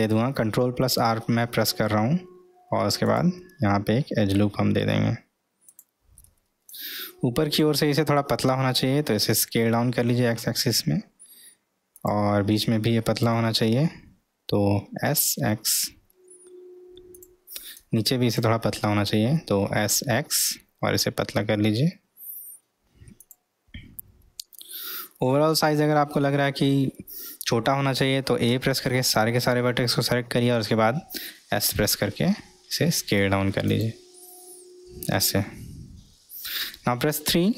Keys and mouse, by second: 6.7-7.7 drag, 9.1 s, 12.6 click, 15.0 s, 17.7 click, 19.6 s, 24.6-26.6 middle drag, 28.6 a, 30.6 s, 34.2-35.3 middle drag.